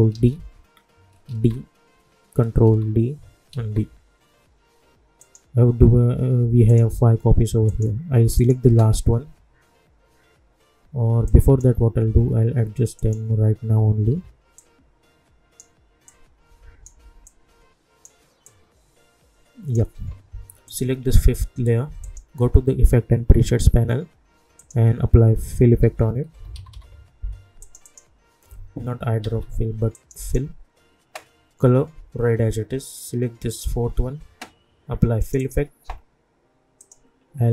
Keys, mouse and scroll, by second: 0.1 ctrl+d, 1.2 ctrl+d, 2.6 ctrl+d, 3.5 ctrl+d, 5.2 click, 11.2 click, 12.0 =, 12.2 =, 13.0 click, 14.1 =, 14.5-20.6 drag, 24.5 click, 25.6-27.2 typing, 27.6 click, 29.2 ctrl+z, 29.9 click, 33.5-37.5 drag.